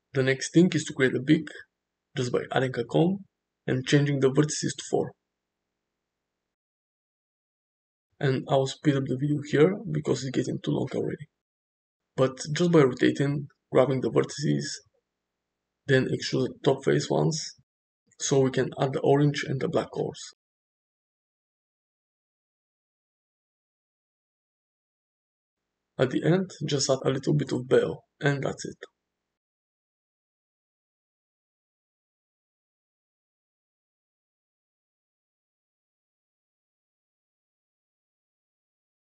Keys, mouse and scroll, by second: 0.7 shift+a, 5.2-6.4 drag, 7.5 r, 11.0 s, 11.4 g, 11.6 s, 11.7 ctrl+a, 12.0 shift+middle click, 12.3 middle click, 12.7 g, 13.3 Tab, 13.4 middle click, 13.6 click, 13.8 shift+middle click, 13.9-18.5 typing, 15.8 click, 19.3 alt+2, 19.8-23.3 typing, 20.5 Tab, 20.7 Tab, 21.4 ctrl+z, 24.5 g, 24.6 middle click, 25.0 3, 25.2 g, 26.0 Tab, 26.6 middle click, 27.0 click, 27.2 click, 27.3 click, 27.7 ctrl+a, 28.2 click, 29.0 click, 29.3 0, 29.7-30.8 shift+drag, 31.0 click, 31.3 middle drag, 31.5 shift+middle click, 31.6-32.2 middle drag, 32.3 middle click, 32.7 middle click, 33.2-35.5 typing, 33.8 shift+middle click, 33.8 Tab, 34.0 click, 34.3 click, 34.8 click, 35.2 click, 35.4 alt+z, 35.4 click, 35.8 Tab, 36.0 shift+middle click, 36.2 middle click, 36.4 middle click, 36.6 middle drag, 37.1-37.5 middle drag, 38.4 click, 38.5 middle drag, 39.0 shift+click.